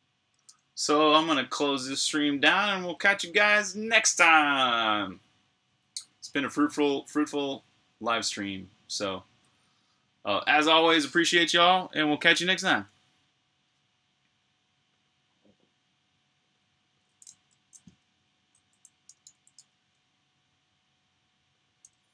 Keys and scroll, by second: 18.1-19.9 typing.